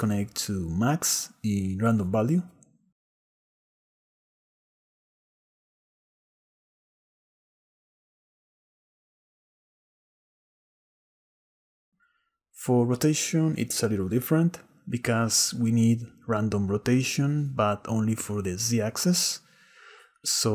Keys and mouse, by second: 0.4 click, 0.7-2.5 drag, 5.4-7.5 drag, 6.5 s, 8.0 shift+click, 8.2-11.3 shift+middle drag, 13.7 click, 16.3-19.7 drag, 19.7 x.